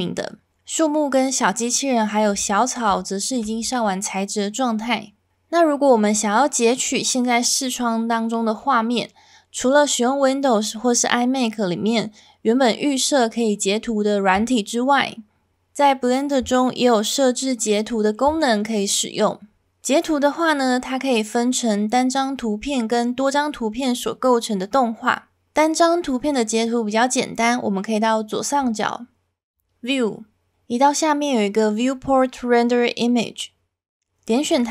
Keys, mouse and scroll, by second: 2.9-3.3 shift+middle drag, 29.6-34.7 drag.